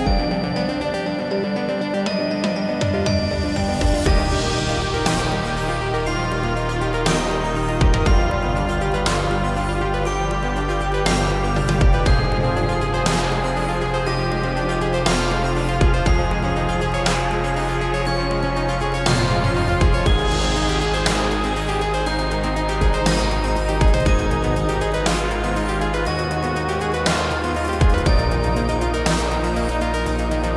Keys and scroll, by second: 3.6 ctrl+a, 6.0 ctrl+c, 10.7 ctrl+v.